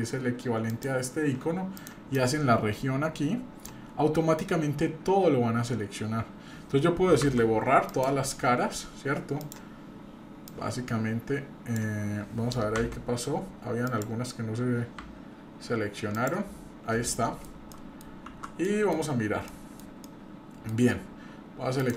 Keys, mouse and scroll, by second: 0.7 click, 1.8 click, 2.1-3.7 drag, 7.2 Delete, 9.4 click, 10.5-11.8 drag, 12.7 Delete, 15.0 Delete, 17.1 middle click, 17.7 middle click, 18.3 shift+z, 18.7 middle click, 19.1-19.5 scroll up 1, 19.5 middle click, 20.0 middle click, 21.8 click.